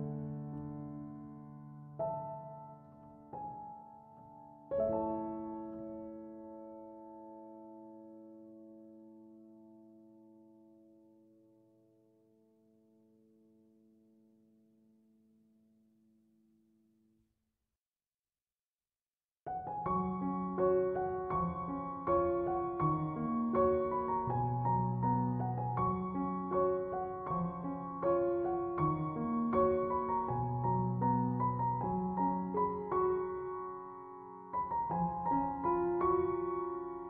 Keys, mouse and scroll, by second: 0.3 5, 0.8 Return, 8.8 2, 9.2 Return, 32.1 Escape.